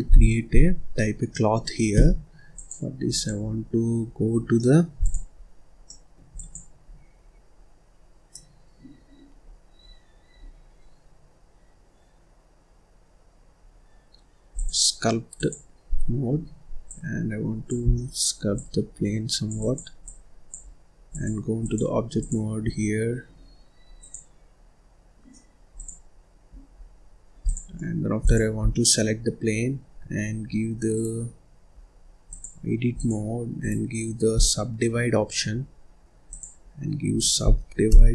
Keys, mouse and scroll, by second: 0.1 ctrl+s, 0.5 scroll down 1, 0.8-1.2 scroll up 1, 1.2 scroll down 1, 1.3-2.5 middle drag, 2.5-3.9 drag, 3.9-4.3 scroll up 2, 4.3 scroll down 1, 4.5 middle click, 4.9 click, 5.3-5.8 scroll up 1, 5.8 middle click, 6.3 click, 6.8-7.2 scroll down 3, 7.2-8.3 scroll up 1, 8.3-9.4 middle drag, 9.4-9.7 scroll down 1, 9.7-10.1 scroll up 1, 14.5-17.9 drag, 17.9 scroll down 1, 17.9 middle click, 18.5-22.2 drag, 22.6-24.6 middle drag, 24.6 click, 26.0 click, 26.7 scroll up 2, 26.9-27.4 scroll down 2, 27.4 click, 27.7 middle click, 28.2 click, 28.6 scroll down 1, 28.7 middle click, 29.1-29.5 scroll up 1, 29.5-29.9 scroll down 2, 29.9-30.9 scroll up 1, 30.9-32.2 right drag, 32.2-33.5 drag, 33.5-36.2 right drag, 36.2-38.1 drag.